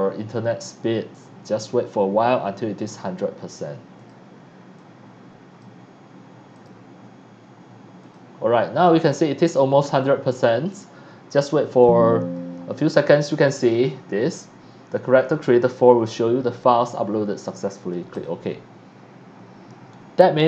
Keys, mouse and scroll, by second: 3.9 click, 4.7 click, 6.5 click, 8.0 click, 18.1 click.